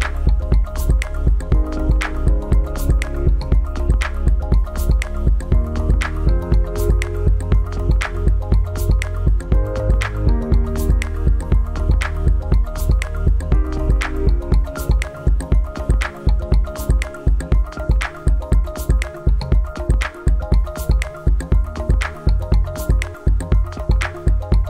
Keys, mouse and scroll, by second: 17.3 scroll down 1, 17.8-18.6 scroll up 1, 18.6 scroll down 1, 18.8 scroll up 1, 20.9 click.